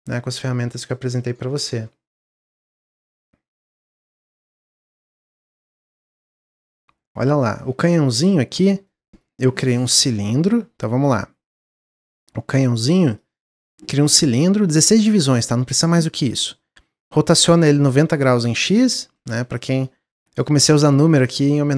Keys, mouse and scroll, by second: 6.3-6.8 scroll up 4, 6.8-7.3 middle drag, 7.3 scroll up 2, 7.7-8.5 shift+middle drag, 8.5 click, 8.8-9.6 middle drag, 9.6 click, 12.4-12.8 scroll down 2, 13.1 click, 14.6 ctrl+z, 16.9 click, 17.8-20.4 drag, 20.7 middle click, 21.0 click, 21.4 z.